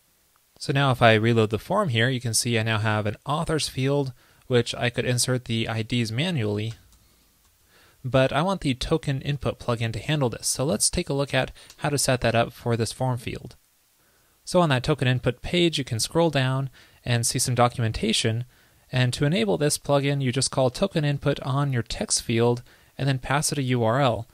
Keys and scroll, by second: 1.6 super+r, 11.5 alt+BackSpace.